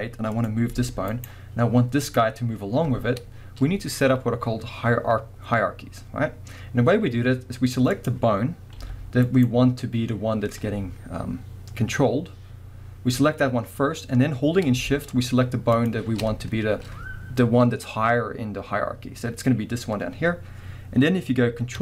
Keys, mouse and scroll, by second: 0.3 click, 0.6 g, 1.3 right click, 2.0 click, 3.4 scroll down 1, 6.7-7.9 scroll up 1, 7.9 click, 8.8 g, 9.4 right click, 15.8 shift+click.